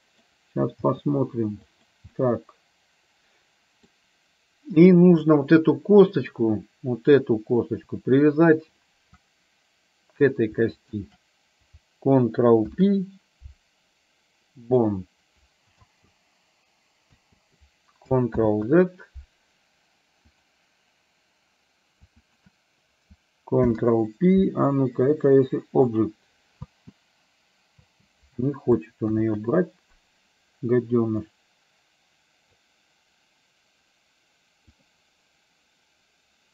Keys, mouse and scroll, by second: 0.8 g, 2.2-4.1 middle drag, 11.0 shift+click, 12.7 ctrl+p, 16.0 space, 17.2 space, 18.5 ctrl+z, 20.5 click, 22.2 shift+click, 23.6 ctrl+p, 26.7 space, 28.0 space, 29.2 ctrl+z, 31.3-32.7 drag, 34.9 click.